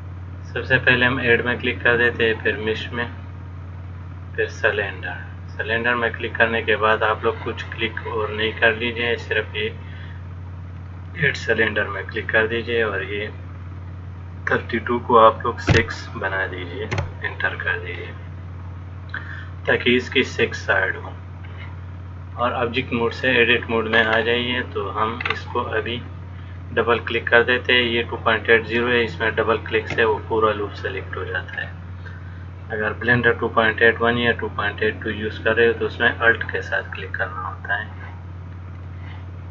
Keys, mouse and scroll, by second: 1.5 click, 13.8 click, 19.9-21.2 scroll down 1, 21.2 click, 21.2-22.2 scroll down 3, 24.1-25.5 scroll up 5, 26.6 click, 26.6 scroll up 2, 29.4 shift+middle click, 39.0 click.